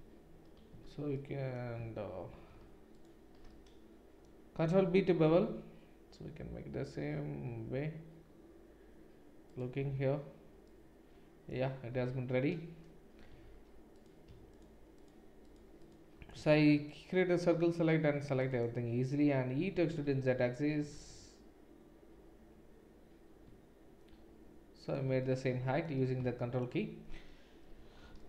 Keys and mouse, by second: 0.7 ctrl+z, 2.9 alt+shift+click, 5.3 ctrl+b, 10.1 Tab, 11.9 Tab, 13.3 3, 13.9 click, 13.9 middle click, 14.9 shift+click, 14.9 shift+middle click, 15.4 shift+click, 15.4 shift+middle click, 16.4 c, 18.7-28.2 middle drag, 19.6 e, 27.8 2.